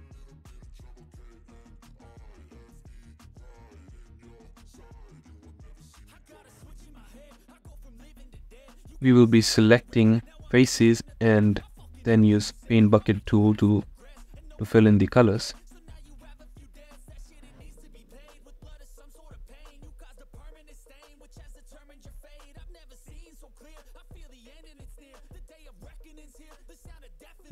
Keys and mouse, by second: 7.8 ctrl+i, 10.5 click, 12.1 b, 14.8 b, 15.9 b, 16.8 b, 17.7 b, 19.0 b, 20.1 b, 21.1 b, 22.5 b, 23.6 b, 25.1 b, 26.2 b, 27.1 b.